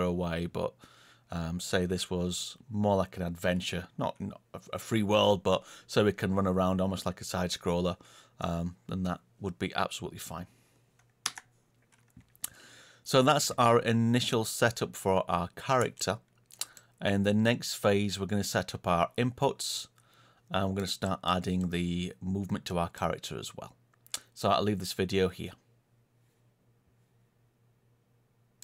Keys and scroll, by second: 11.2 Escape, 14.5 Page_Down.